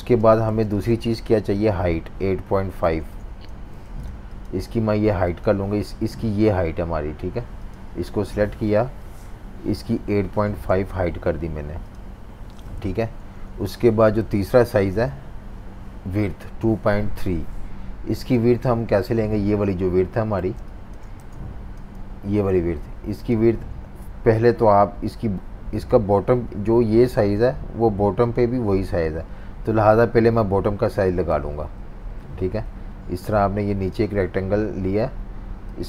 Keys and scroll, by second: 0.5 typing, 2.9-3.7 typing, 9.5-10.8 typing, 12.8 super+-, 13.0 super+-, 13.2 super+-, 14.3 z, 18.5 super+-, 18.6 super+-, 20.4-22.0 typing, 31.9 super+y.